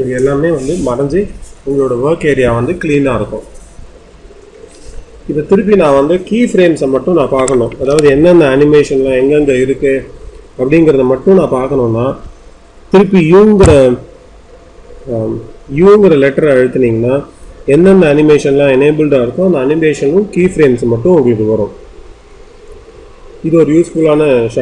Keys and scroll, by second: 13.5 u.